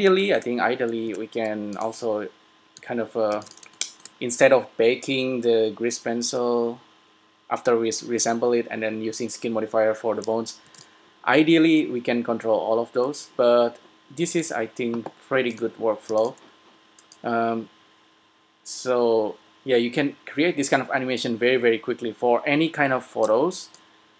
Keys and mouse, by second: 1.2 Tab, 3.0 a, 3.6 s, 10.8 s, 16.2 s, 18.6 click, 24.0-24.1 drag.